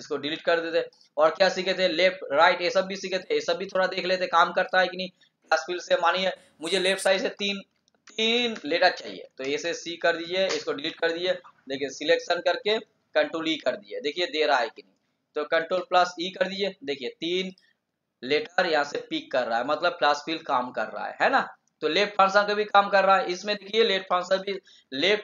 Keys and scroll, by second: 15.6 ctrl+e, 24.6 shift+Down.